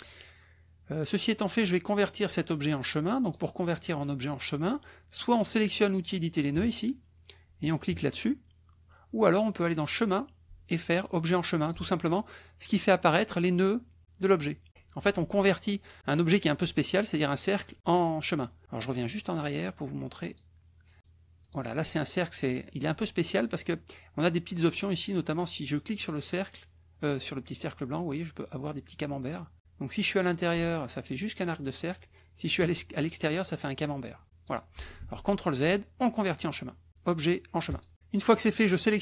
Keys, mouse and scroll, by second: 3.2 click, 9.8 click, 11.7 click, 20.3 click, 21.0 click, 21.5 click, 25.9-34.6 drag, 35.0 ctrl+z, 36.2 click, 37.8 click, 38.4 click.